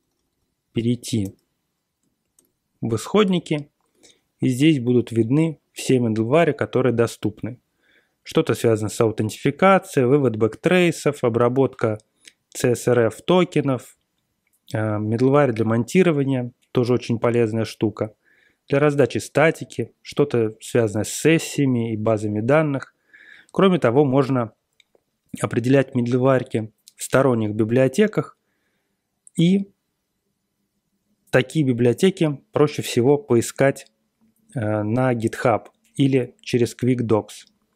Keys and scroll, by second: 0.0-0.2 typing, 1.2 Return, 2.8 Page_Down, 3.0 Page_Down, 3.1 Page_Down, 3.1 Page_Down, 3.1 Page_Down, 3.2 Page_Down, 3.2 Page_Down, 3.2 Page_Down.